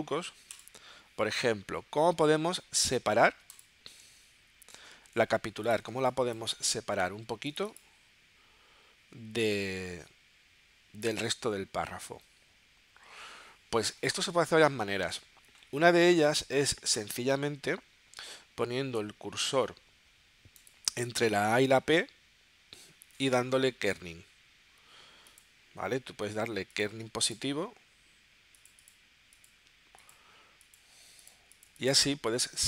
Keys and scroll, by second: 6.1 space.